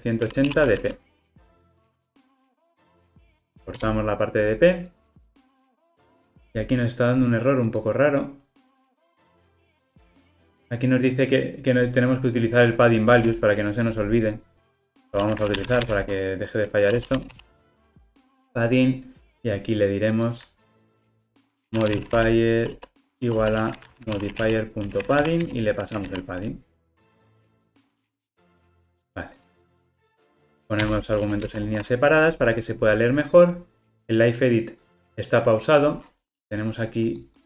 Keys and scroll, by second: 3.3 alt+Return, 25.6 Return, 29.8 alt+Return, 31.4 alt+super+l.